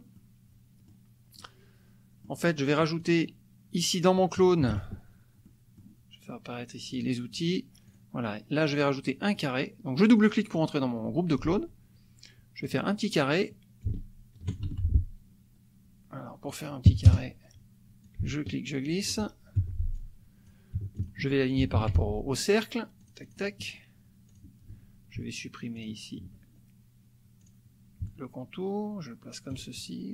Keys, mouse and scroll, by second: 0.2 click, 1.4-2.4 drag, 3.0 click, 4.7 KP_Subtract, 5.5 click, 6.9 click, 7.9 click, 9.3 click, 10.1 click, 12.7 click, 13.8 ctrl+shift+click, 14.7 ctrl+shift+z, 17.1 KP_Add, 18.0-19.2 ctrl+drag, 19.5 ctrl+F1, 19.9-20.6 ctrl+drag, 20.9 shift+click, 21.8 ctrl+shift+a, 23.0 click, 23.6 click, 24.4 click, 25.8 shift+click, 27.4 click, 28.1-29.7 ctrl+drag.